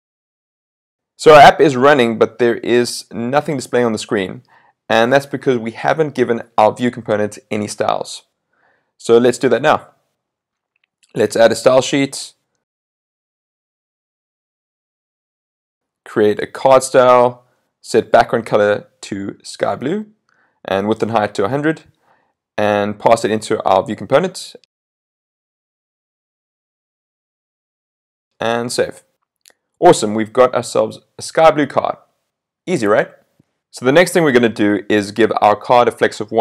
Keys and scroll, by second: 28.9 super+s.